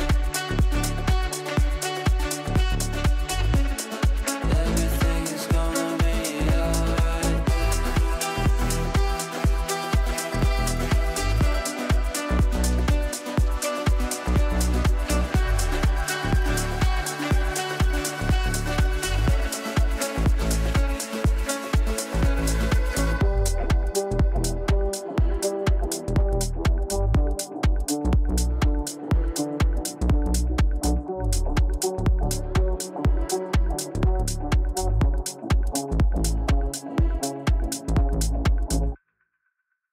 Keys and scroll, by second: 3.1 Delete.